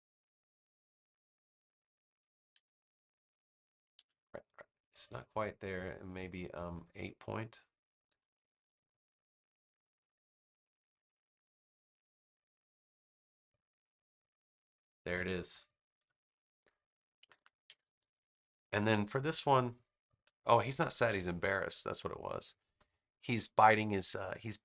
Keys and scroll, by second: 3.9 super+z, 8.0 8, 8.3 Return, 15.9 v, 17.1 super+-, 17.7 super+=, 19.2 space, 21.0 super+=, 21.8 space.